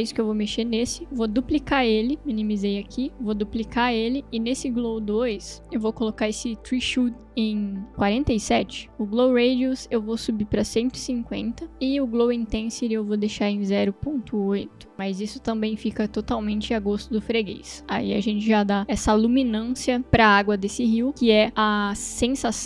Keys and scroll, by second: 3.5 ctrl+d, 8.7 4, 10.8-11.8 typing, 14.0 ,, 14.4 8, 14.9 Return, 16.6 space.